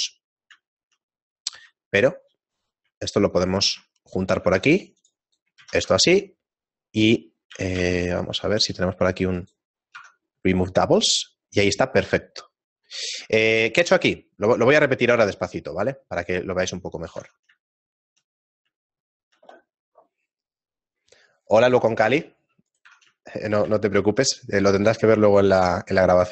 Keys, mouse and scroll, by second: 0.1 middle click, 1.1 shift+middle click, 1.4 right click, 2.6 right click, 3.4 right click, 4.4 ctrl+Tab, 5.2 right click, 6.0 ctrl+x, 7.6 shift+middle click, 7.6-8.4 scroll down 1, 7.6 a, 8.4 a, 8.9 w, 10.0 Tab, 10.8-11.2 scroll down 3, 11.9 scroll down 2, 12.8 scroll up 4, 12.8 Tab, 14.4 shift+middle click, 14.4-15.2 scroll down 1, 15.2 shift+middle click, 22.3 middle click, 22.6 right click, 22.8 Tab, 23.2 shift+middle click, 24.4 middle click, 26.2 right click.